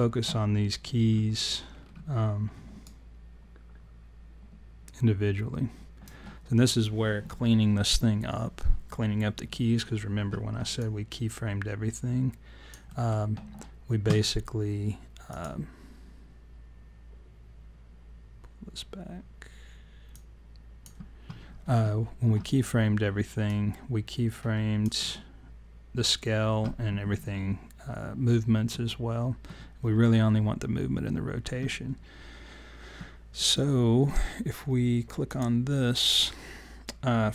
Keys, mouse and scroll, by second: 0.6-1.4 scroll up 7, 1.7-2.3 scroll down 9, 2.8 alt+right click, 10.8 alt+click, 12.9 alt+middle click, 15.3 click, 20.1 click, 23.4 alt+click, 35.3 click.